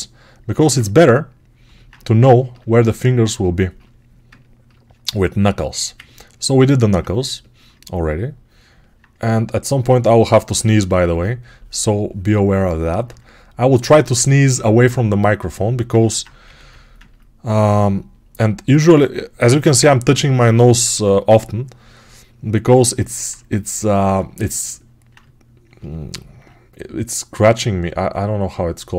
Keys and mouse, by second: 0.5 alt+q, 3.1-12.6 ctrl+drag, 14.7-28.9 right drag, 16.3 g, 19.6 ctrl+1, 20.8 2, 27.3 2.